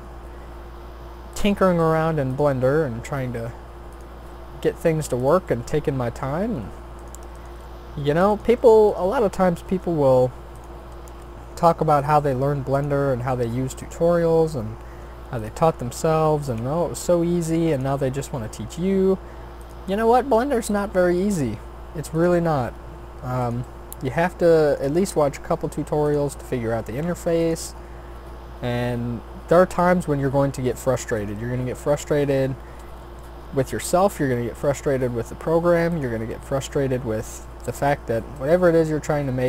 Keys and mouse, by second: 1.8 r, 2.6 s, 4.2 g, 7.0 click, 9.7 shift+d, 10.9 r, 12.2 g, 13.1 e, 14.1 s, 15.6 e, 16.9 s, 18.3 e, 20.0 s, 20.9 e, 22.6 s, 23.6 g, 24.9 e, 26.5 s, 27.7 e, 30.1 e, 33.0 ctrl+z, 33.9 s, 36.5 f, 38.3 g.